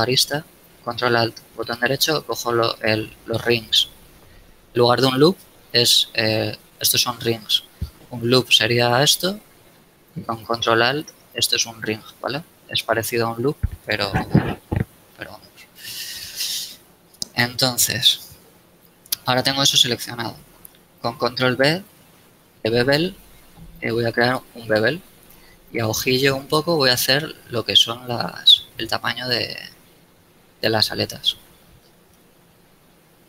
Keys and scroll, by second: 17.3 KP_1, 22.2 ctrl+b, 32.7 KP_1.